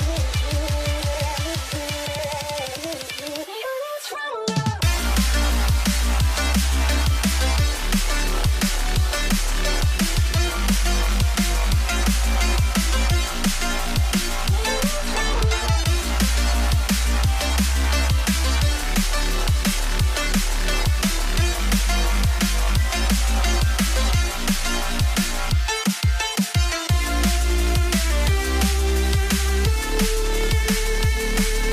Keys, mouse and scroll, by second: 11.7 Up, 12.0 Up, 12.5 Up, 12.8 Up, 12.9 Up, 13.5 typing, 15.0 right click, 16.3 shift+click, 19.7 ctrl+g, 27.3 typing, 28.5 alt+right click.